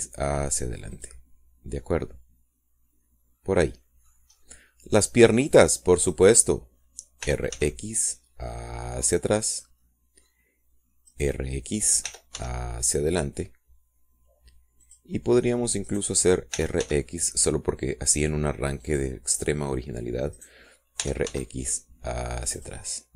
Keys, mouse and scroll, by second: 0.1 click, 0.8 r, 1.0 x, 2.3 click, 2.7-3.1 scroll down 2, 3.1 click, 3.7-5.5 middle drag, 5.7 scroll up 1, 7.4 click, 8.6 r, 8.9 x, 10.9 click, 12.4 click, 13.4 r, 13.7 x, 16.2 click, 17.2 right click, 17.9 r, 18.3 x, 20.2 click, 21.7 click, 21.8 right click, 22.3 r, 22.7 x.